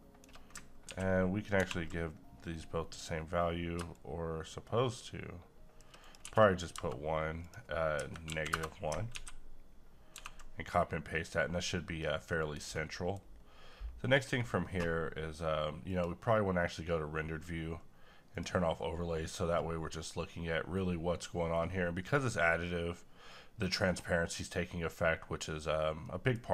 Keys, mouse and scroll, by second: 0.9-1.6 typing, 3.9-6.0 drag, 6.2 1, 7.5 click, 9.1 ctrl+c, 10.1 ctrl+v, 12.0-12.3 scroll down 1, 12.3 middle click, 12.6-12.9 scroll down 1, 12.9 middle click, 13.3 scroll up 1, 15.9 click, 18.3 click, 25.0 middle click, 25.5 scroll up 1, 26.0 middle click.